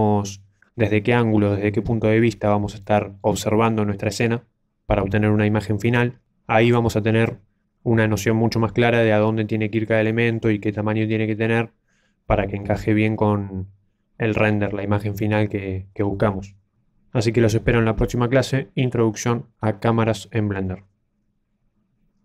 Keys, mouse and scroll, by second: 0.3-0.9 scroll up 5, 0.9 middle click, 2.9-3.6 scroll up 1, 7.0-7.6 scroll down 1, 7.6-8.3 scroll down 2, 8.3 middle click, 8.3 scroll down 1.